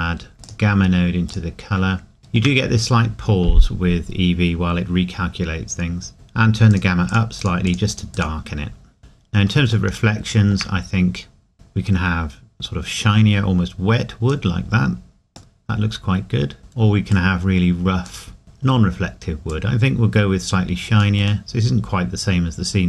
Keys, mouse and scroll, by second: 0.4 click, 1.8-2.2 scroll up 1, 2.2 shift+middle click, 3.8 scroll up 1, 6.7 click, 9.0-9.7 scroll down 1, 10.8 scroll up 1, 11.5 click, 14.6 scroll up 1, 15.6 middle click, 17.1 click, 18.4 scroll down 1, 18.4 middle click, 19.5 click, 21.5 middle click, 22.6 scroll up 1.